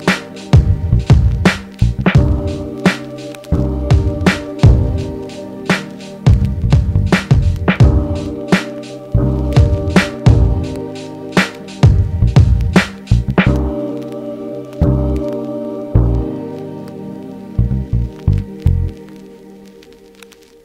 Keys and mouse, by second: 13.1 KP_0.